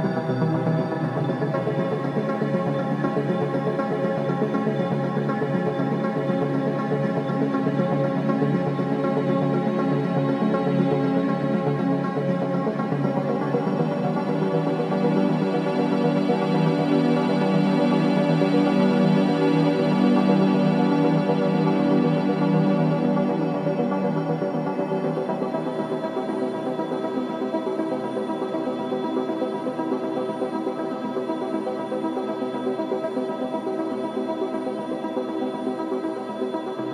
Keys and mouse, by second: 0.0 click, 4.9 click, 6.0 ctrl+alt+click, 6.6 alt+shift+click, 7.3 ctrl+alt+click, 8.0 ctrl+alt+click, 8.5 ctrl+alt+click, 8.9 ctrl+alt+shift+click, 9.9-11.0 drag, 11.7-12.7 drag, 13.8 shift+d, 14.7 Return, 16.3 Tab, 17.9-20.2 typing, 21.3 Left, 21.5 Left, 21.7 Left, 21.9 Left, 22.1 Left, 22.3 Left, 22.5 Left, 23.4 BackSpace, 23.6 BackSpace, 23.8 BackSpace, 24.0 BackSpace, 24.7 Tab, 26.7 click, 29.2 click, 30.0-32.2 drag, 33.2 click, 34.9 shift+d, 35.7 Return.